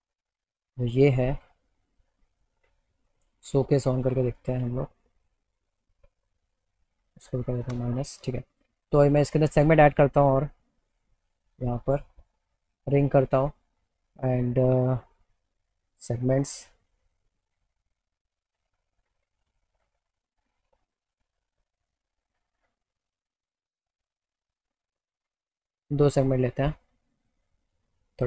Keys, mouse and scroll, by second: 0.6 click, 2.0 alt+middle click, 3.2 click, 5.2 click, 5.9 alt+middle click, 9.6 click, 11.2 click, 12.7 click, 13.3 click, 15.3 click, 17.4-19.0 alt+middle drag, 20.0 click, 23.0 click, 24.1 click, 25.4 click, 26.8-28.2 drag.